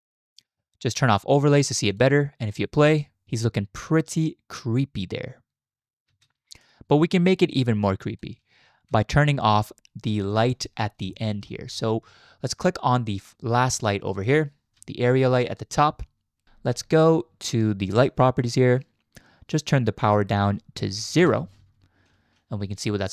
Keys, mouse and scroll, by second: 1.9 click, 2.7 space, 3.2 space, 6.6-8.2 drag, 6.6 space, 8.6 z, 10.3 click, 11.1 shift+drag, 11.3 middle click, 14.1 click, 15.1 shift+drag, 15.3 shift+middle click, 15.8 shift+middle drag, 18.0 click, 20.2-21.2 drag, 22.1 z.